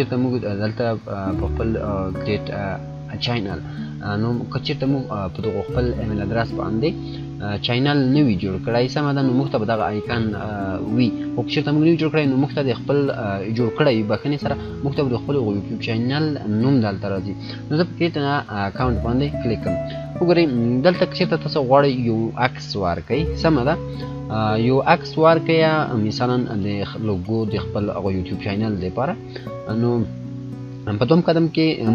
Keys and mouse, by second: 16.5 click, 31.2-31.9 drag.